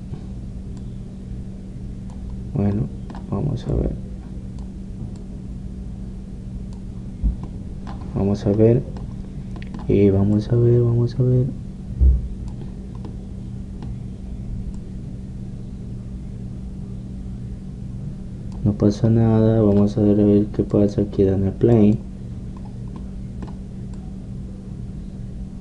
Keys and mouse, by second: 3.8-4.8 middle drag, 5.6-8.1 drag, 8.1 middle click, 11.5-13.1 drag, 13.1-16.0 middle drag, 16.0-17.7 drag, 20.2-21.8 middle drag, 21.8-23.7 drag, 23.7 middle click, 25.2 middle click.